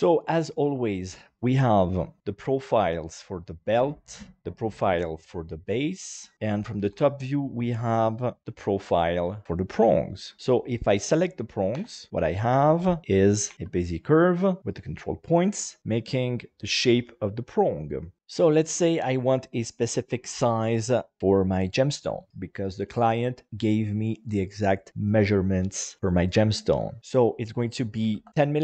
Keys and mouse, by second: 0.6 KP_1, 1.5 shift+middle click, 3.5 right click, 6.8 KP_7, 10.3 middle click, 11.8 Tab, 12.1 middle click, 12.7 alt+z, 13.0 shift+middle click, 13.5 a, 14.6 middle click, 14.6 a, 18.2 Tab, 18.6 alt+z, 19.1 right click, 27.4 click.